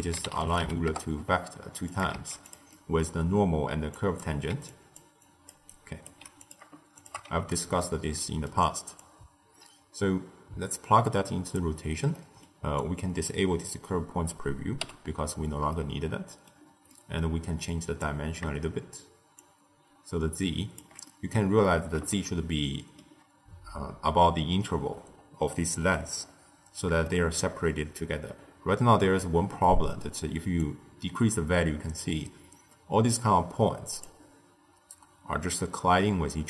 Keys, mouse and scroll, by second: 2.1 shift+d, 2.6-3.9 middle drag, 3.9 click, 4.4-6.1 typing, 4.6 click, 5.1 click, 5.6 right click, 6.3 click, 6.9 shift+click, 7.2 x, 7.5-8.9 middle drag, 8.9 drag, 12.0-12.7 middle drag, 12.7 click, 14.7 m, 15.6-17.5 middle drag, 17.5 click, 19.3-20.9 shift+drag, 20.9-25.2 middle drag, 26.1-26.9 scroll up 2, 26.9-30.5 shift+middle drag, 30.5-33.5 drag.